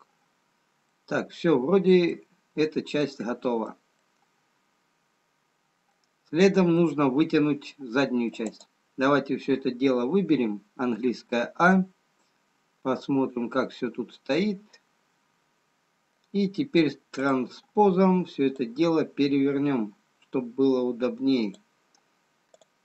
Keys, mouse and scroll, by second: 0.7-2.5 scroll down 2, 2.5 middle click, 2.5-4.1 scroll down 1, 4.1 middle click, 8.3 middle click, 9.8 click, 13.8 middle click, 13.8-15.1 scroll down 7, 18.4 click, 19.5 click, 22.6 click.